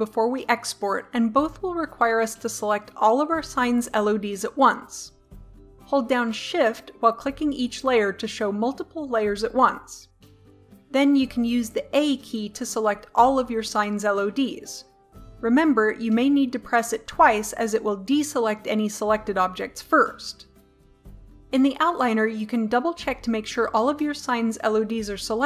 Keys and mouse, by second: 6.8-9.9 drag, 11.2 a, 12.6 a.